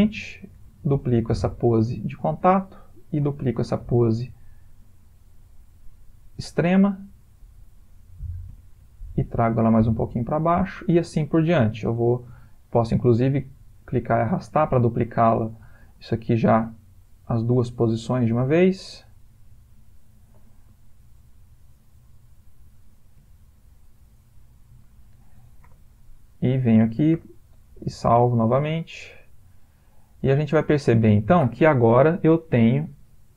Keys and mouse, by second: 0.6 shift+d, 2.7 click, 3.7 shift+d, 5.9 click, 8.5 g, 11.6 shift+click, 13.2 click, 15.8 shift+d, 18.0 click, 22.7 g, 25.7 i, 27.1 i, 28.2 click, 30.1 space.